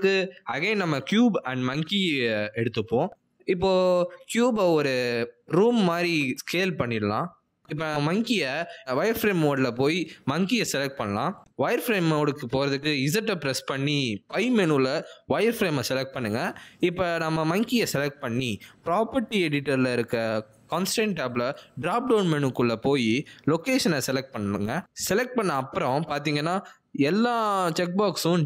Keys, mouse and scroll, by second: 1.2 click, 3.5 alt+g, 3.8 middle click, 5.3 s, 6.7 middle click, 7.8 s, 8.7 middle click, 9.9 click, 11.3-12.4 scroll down 3, 11.6-12.4 scroll up 1, 12.4 middle click, 12.4 g, 13.7 middle click, 15.0 click, 15.4 z, 21.4 click, 26.9 middle click, 27.7 g.